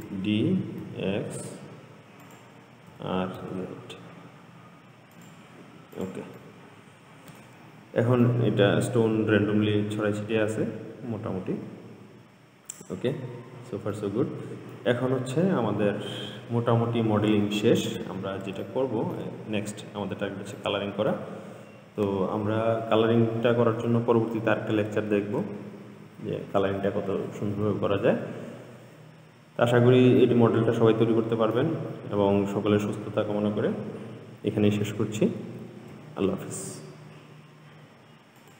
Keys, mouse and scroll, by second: 0.1 shift+d, 3.2 r, 6.2 click, 6.6-7.8 middle drag, 7.8-8.5 scroll down 2, 8.5-11.5 middle drag, 13.6-14.2 scroll up 2, 14.2-15.3 middle drag, 15.3-16.8 scroll down 2, 16.8-18.4 scroll down 1, 18.8-19.7 shift+middle drag, 19.7-20.8 scroll up 1, 20.8-23.9 middle drag, 25.4 ctrl+s, 30.5-33.5 middle drag, 35.8 ctrl+s.